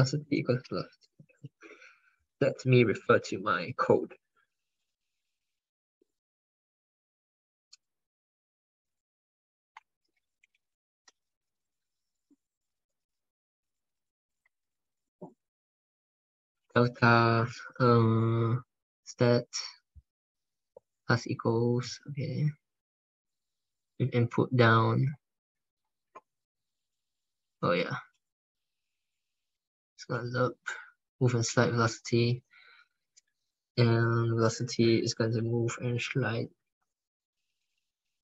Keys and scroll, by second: 9.9 ctrl+f.